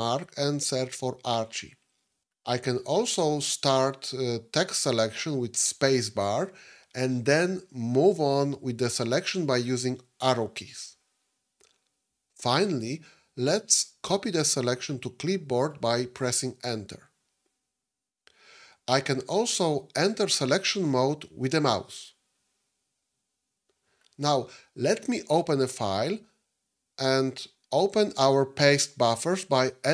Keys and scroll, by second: 5.8 space, 10.2 Left, 10.2 Up, 10.2 Right.